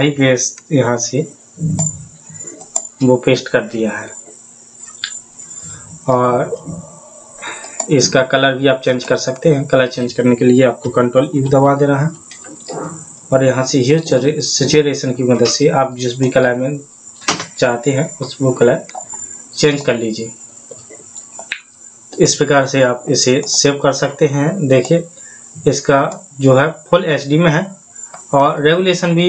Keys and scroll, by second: 11.8 ctrl+u.